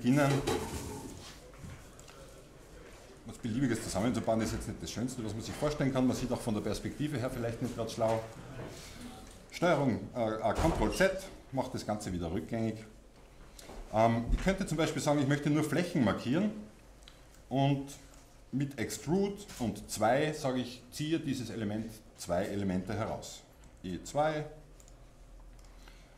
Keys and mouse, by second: 0.1 e, 0.6 click, 1.4-4.2 drag, 1.4 e, 4.2 e, 10.9 ctrl+z, 11.3 ctrl+z, 15.0 click, 19.1 click, 19.1 e, 22.2 click, 23.6 click, 24.9-26.1 drag.